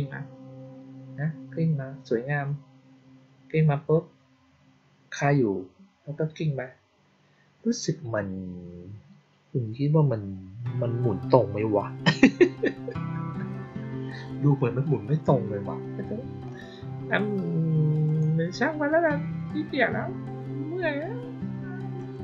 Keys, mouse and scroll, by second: 18.0 click, 21.9 click.